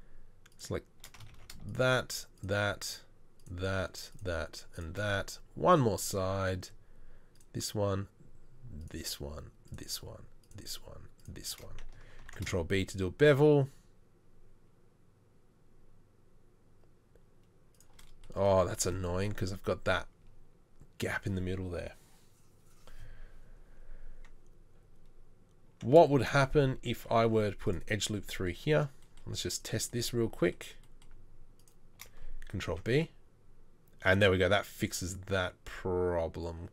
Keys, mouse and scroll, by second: 1.3 ctrl+z, 12.2 ctrl+b, 26.3 shift+middle click, 26.6 ctrl+z, 27.1 ctrl+r, 32.7 ctrl+b.